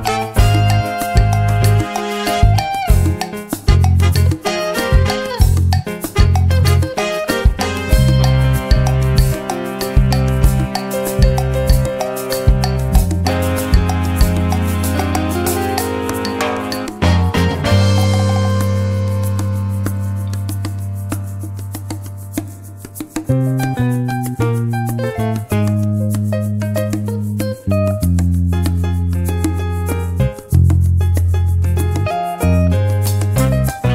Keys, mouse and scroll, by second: 0.7-2.2 drag, 4.1 click, 4.6 click, 5.6 click, 6.0 click, 7.7 click, 9.3-11.5 drag, 12.1 click, 13.2-15.6 drag, 16.4 click, 19.0 click, 20.6 click, 21.7 click, 22.6 click, 23.6 click, 24.4 click, 27.4-28.5 drag, 30.2 ctrl+d, 31.9 click, 32.8-33.9 drag.